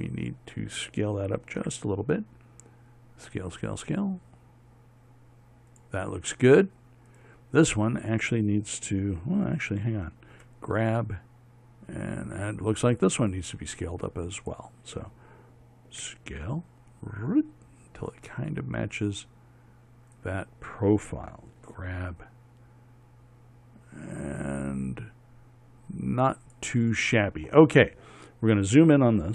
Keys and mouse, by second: 2.2 s, 7.7-11.0 right drag, 11.0 g, 16.6 s, 22.4 g.